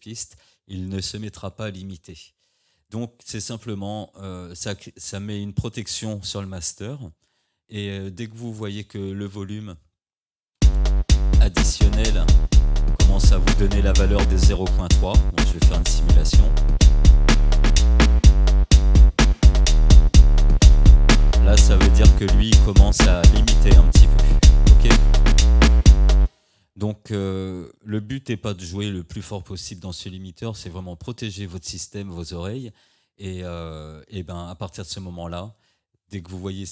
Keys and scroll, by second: 10.6 space, 26.3 space, 29.0 ctrl+z.